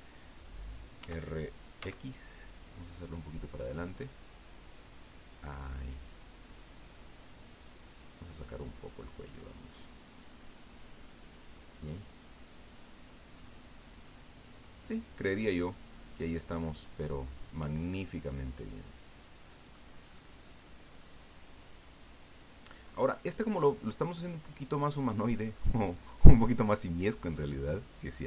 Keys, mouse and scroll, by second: 1.0 r, 1.8 x, 3.0 click, 4.0-7.3 drag, 8.2-9.5 drag, 10.1-12.2 drag, 12.8-13.3 scroll down 1, 13.3-16.3 middle drag, 16.3 click, 17.4 middle click, 17.9-19.9 drag, 20.0 middle click, 20.6 middle click, 21.1 scroll down 2.